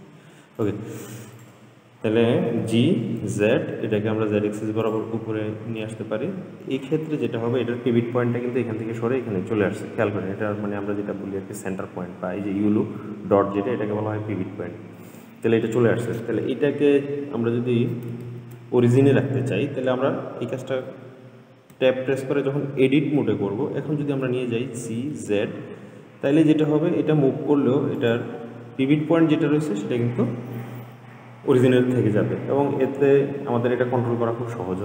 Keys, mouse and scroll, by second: 0.8 click, 1.6 click, 2.8 g, 10.4-12.2 scroll up 3, 12.2-12.7 scroll up 2, 12.9-16.0 scroll down 2, 18.5 ctrl+z, 22.1 Tab, 24.4 g.